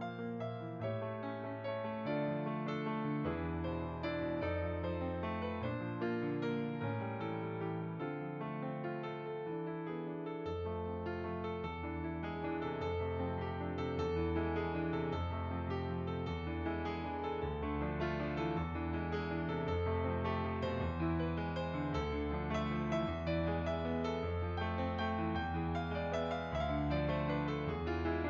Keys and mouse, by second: 0.2 shift+click, 1.4 middle click, 1.8 shift+click, 2.5 middle click, 3.1 shift+click, 3.9 middle click, 4.4 shift+click, 5.3 middle click, 5.9 shift+click, 7.0 middle click, 7.5 shift+click, 8.4 middle click, 8.8 shift+click, 9.9 middle click, 10.5 shift+click, 13.2 middle click, 13.9 shift+click, 14.9 middle click, 15.4 shift+click, 16.4 shift+click, 16.7 middle click, 17.1 shift+click, 17.9 middle click, 18.4 shift+click, 19.4 middle click, 19.8 shift+click, 20.8 middle click, 22.2 shift+click, 24.7 middle click, 25.9 shift+click, 26.8 middle click, 27.4 shift+click.